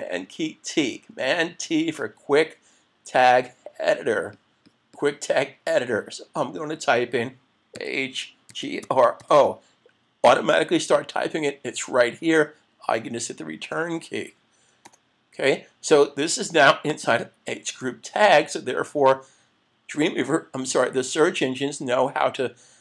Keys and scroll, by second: 1.6 super+t, 13.6 Return, 17.8 super+s.